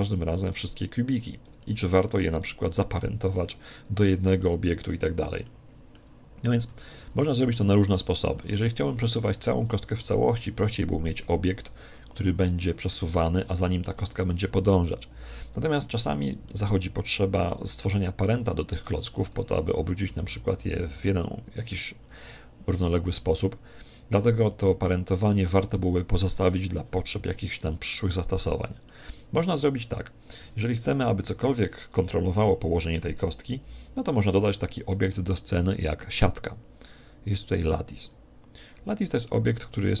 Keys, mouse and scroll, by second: 4.4-7.2 middle drag, 7.0 Tab, 7.6-11.1 middle drag, 7.9 Tab, 16.5-18.2 middle drag, 18.4-20.8 right drag, 27.9-29.7 middle drag, 29.7 Tab, 30.9 KP_1, 32.3 KP_5, 33.9 KP_5, 35.1 shift+a, 38.8-40.0 middle drag.